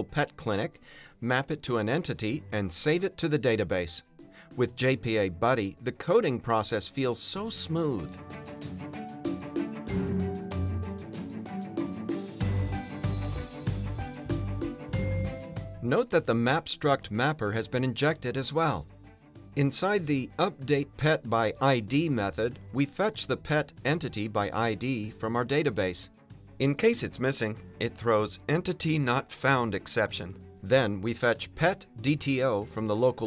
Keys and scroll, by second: 1.7 Return, 1.9 Return, 20.8 Return, 25.8 Return, 28.2 Return, 30.9 Return.